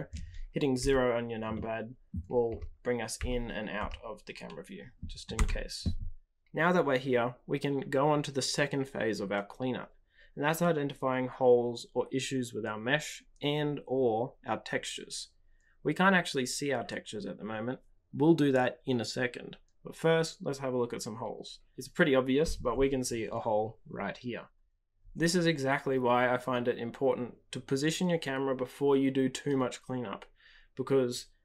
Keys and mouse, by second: 0.7 KP_0, 1.5-2.1 middle drag, 2.4 KP_0, 3.1 KP_0, 3.7 KP_0, 5.3 t.